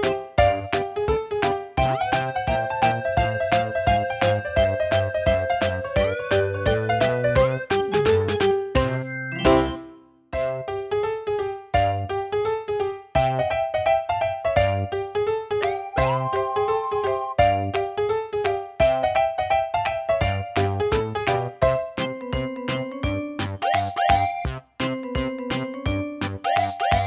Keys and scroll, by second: 14.9 super+d, 17.9 super+d, 18.7 super+d.